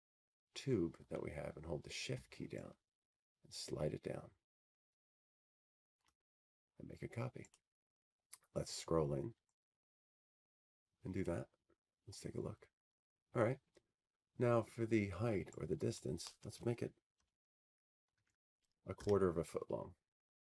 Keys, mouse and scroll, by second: 0.5 Tab, 3.6-7.1 drag, 7.7 click, 11.5 shift+click, 13.1 click, 13.7-15.1 scroll, 16.8 click, 17.4-18.1 scroll.